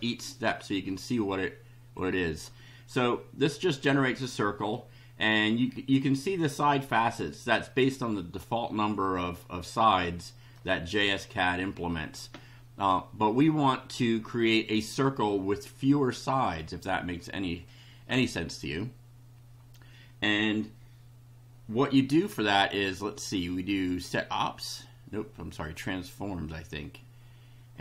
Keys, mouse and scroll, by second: 1.9 click, 3.9 middle click, 8.4-10.7 middle drag, 23.9 click, 25.6 click.